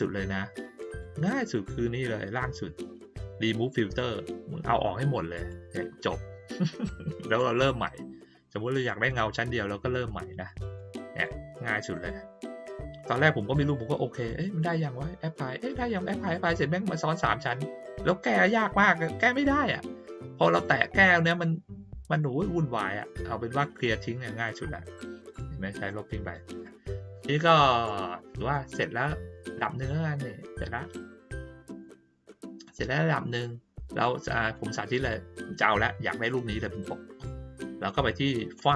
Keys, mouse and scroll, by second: 0.8 click, 5.3 click, 6.8 click, 10.7 click, 11.9 right click, 13.5 click, 27.8 middle click, 29.6-31.8 drag, 34.5 click, 38.5 click.